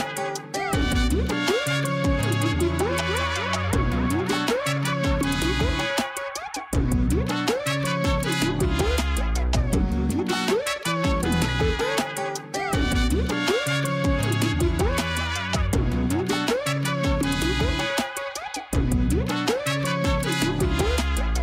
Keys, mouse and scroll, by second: 13.9 click, 14.4-15.0 scroll down 7, 15.9 KP_1, 17.6 KP_3, 18.9 g, 20.6 KP_0.